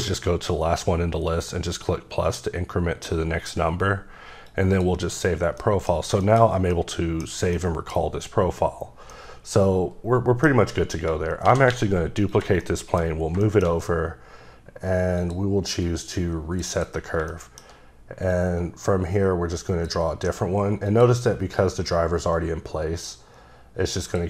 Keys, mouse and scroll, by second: 0.0 click, 1.3 click, 4.4 click, 5.6 middle click, 7.5 middle click, 9.1 middle click, 10.9 scroll down 1, 11.4 shift+d, 11.7 x, 12.3 click, 12.6 shift+middle click, 13.1 scroll up 1, 13.4 shift+middle click, 15.2 click, 15.8 click, 16.7 double click, 17.3 shift+middle click, 18.3 click, 20.9 click, 21.6 click, 24.0 click.